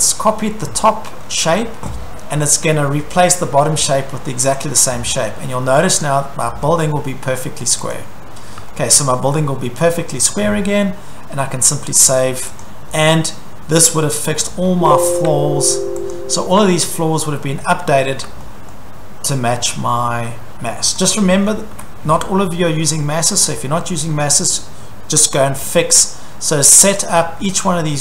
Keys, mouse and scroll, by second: 1.1 scroll, 4.6 click, 6.0 click, 6.6-7.0 scroll, 7.9 click, 8.7-9.3 shift+middle click, 9.9 shift+middle click, 11.7 click, 11.7 scroll, 12.6 click, 13.0-13.6 scroll, 13.9 click, 14.5 scroll, 15.0 Escape, 16.1 click, 17.5 Escape, 18.1 scroll, 18.7 shift+middle click, 21.0 click, 21.4-21.7 scroll, 21.7 Escape, 22.2 shift+scroll, 23.5 shift+scroll, 24.3-26.0 scroll, 26.1 shift+middle click, 26.9 click, 27.1 click.